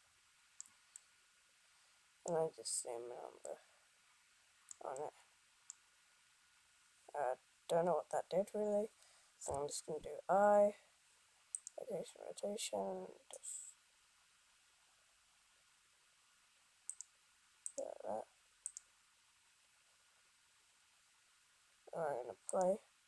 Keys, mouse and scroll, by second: 11.6 i.